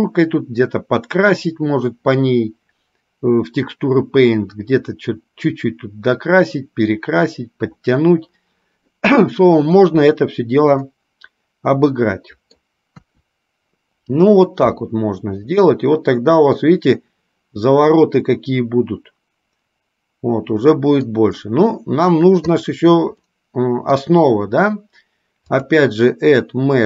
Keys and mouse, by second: 11.1-12.8 middle drag, 16.0-21.5 middle drag, 22.7 click, 23.6-24.2 middle drag, 25.6-26.8 drag.